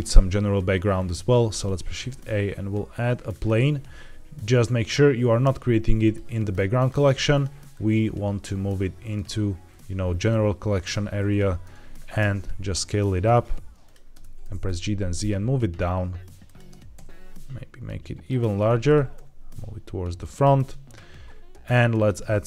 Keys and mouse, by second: 1.5 shift+a, 5.9 click, 6.7 click, 7.2 click, 7.7 drag, 11.6 Tab, 12.1 s, 13.7 click, 14.0 Tab, 14.3 g, 14.6 z, 16.3 click, 16.6 Tab, 16.8 s, 18.5 Tab, 18.8 g, 19.0 y, 21.9 click.